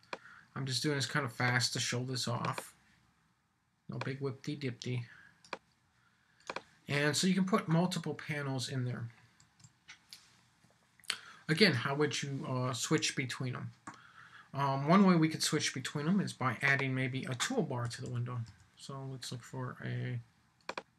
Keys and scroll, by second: 9.4 super+s.